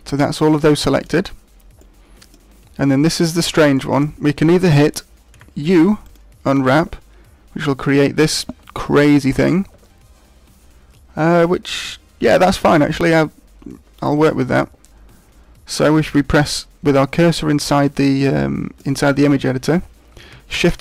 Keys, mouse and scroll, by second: 1.3-1.8 scroll down 2, 1.8 middle click, 2.6-3.1 scroll up 1, 3.1 shift+middle click, 3.1 scroll up 1, 3.7 middle click, 5.3 u.